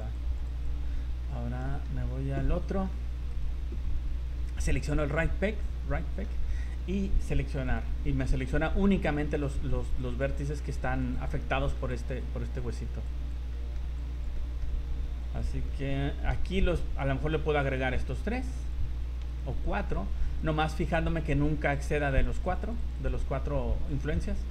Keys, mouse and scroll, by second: 0.1 click, 0.5 click, 1.6 middle click, 2.0-2.5 scroll down 5, 2.5 middle click, 3.3 right click, 5.1 click, 5.6 middle click, 6.4 scroll up 3, 7.5 click, 8.5 scroll down 1, 8.9 scroll up 2, 9.4 click, 9.8 click, 10.0 click, 10.4 click, 10.6 click, 11.0 click, 11.2 click, 11.5 middle click, 11.9 click, 12.2 click, 12.6 click, 13.2 click, 13.5 middle click, 14.0 click, 14.4 middle click, 15.2 click, 15.7 middle click, 16.5 shift+right click, 17.2 shift+right click, 17.6 shift+right click, 18.0 click, 18.3 click, 18.6 click, 19.3 shift+right click, 19.7 shift+right click, 19.9 shift+right click, 20.4 shift+right click, 21.9 click, 22.2-23.0 click, 22.4 click, 22.4 click, 23.9-24.5 scroll down 4.